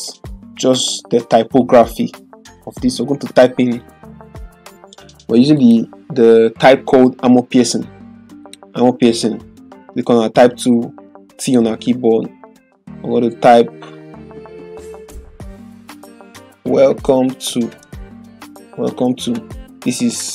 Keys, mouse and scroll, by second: 0.9 typing, 3.3 click, 3.3 typing, 8.4 click, 11.4 click, 15.1 BackSpace, 15.3 Caps_Lock, 16.4-20.3 typing.